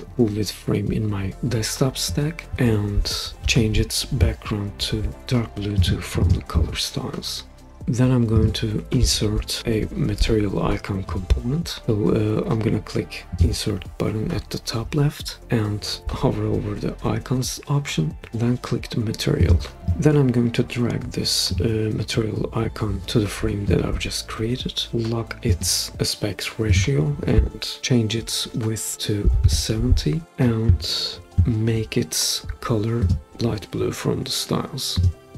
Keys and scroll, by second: 29.0-29.9 typing, 30.3 Return.